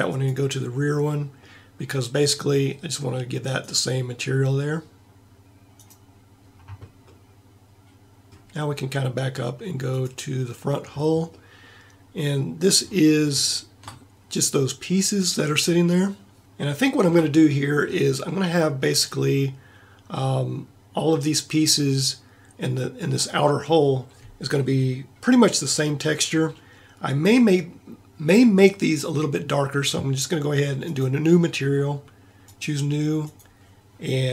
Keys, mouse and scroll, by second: 1.6 middle click, 7.1 middle click, 7.7 middle click, 30.9-34.3 drag.